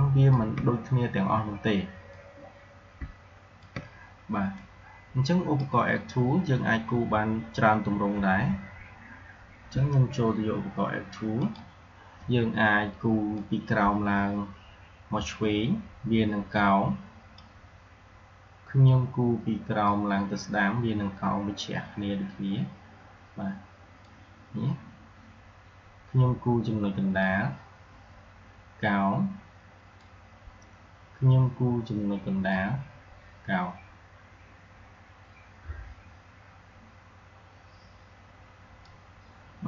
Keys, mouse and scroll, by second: 4.4-8.0 drag, 11.3-19.6 drag, 19.7-26.4 drag, 27.1-32.2 drag, 32.3-39.6 drag.